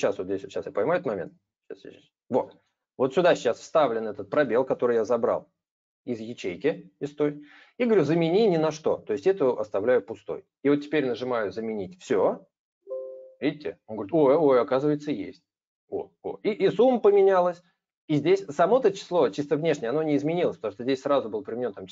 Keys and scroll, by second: 2.4 ctrl+v.